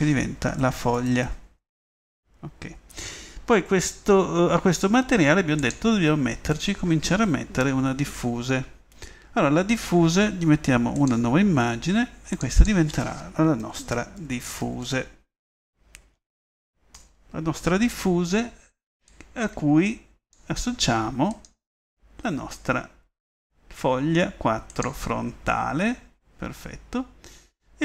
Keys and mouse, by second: 5.6 click, 6.0-11.3 middle drag, 14.3 f, 19.3-19.8 middle drag, 20.4 middle click, 25.2-27.8 middle drag.